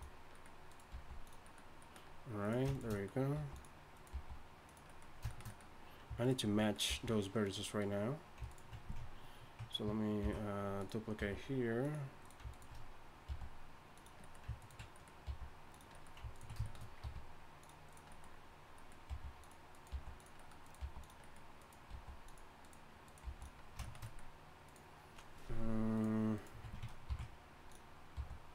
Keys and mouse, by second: 0.9 g, 1.9-2.9 drag, 3.3 g, 4.1 g, 6.9 g, 10.2 ctrl+b, 11.2 g, 13.3 g, 14.6-16.6 drag, 15.2 g, 17.0 r, 19.1 g, 19.9 g, 20.8 g, 21.9 g, 23.2 g, 27.1 ctrl+b, 28.1 g.